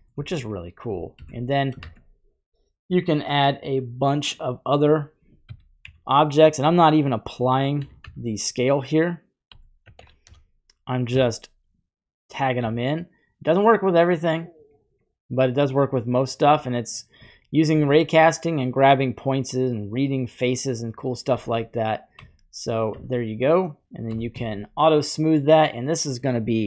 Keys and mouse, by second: 1.2 shift+a, 4.3 shift+a, 5.4 e, 5.8 x, 7.4 click, 7.8 r, 8.0 x, 9.5 y, 9.8 KP_9, 10.0 KP_0, 10.3 Return, 11.1 s, 12.3 click, 13.7 click, 15.0 click, 15.1-15.6 middle drag, 17.3-17.7 shift+middle drag, 19.3-20.4 middle drag, 21.3 Tab, 22.2 z, 22.9 Tab, 24.6 q, 25.0-25.5 drag, 25.5 middle click, 25.6 click, 25.7 middle click, 26.1 click.